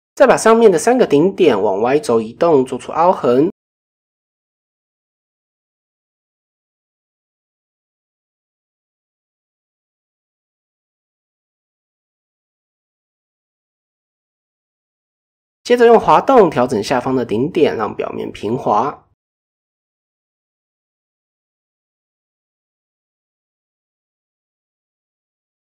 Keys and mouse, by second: 0.7 shift+middle click, 2.6 shift+middle click, 3.3 click, 3.6-3.9 middle drag, 4.4 click, 9.1-9.6 middle drag, 10.1-10.5 middle drag, 10.6-10.9 shift+middle drag, 11.2-12.0 middle drag, 12.2 middle drag, 12.5-12.9 middle drag, 13.2 shift+middle drag, 13.8 shift+middle drag, 14.2-14.9 middle drag, 16.0-16.4 middle drag, 16.5 shift+middle drag, 17.1 middle click, 18.1 click, 19.1-20.0 drag, 20.4 ctrl+z, 20.6-21.0 middle drag, 22.0 click, 23.6-24.0 middle drag, 24.2 shift+middle click.